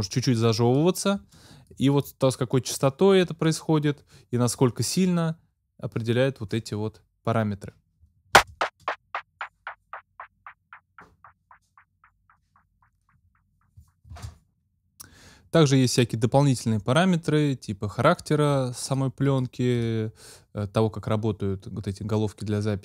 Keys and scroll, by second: 8.4 space, 14.2 space.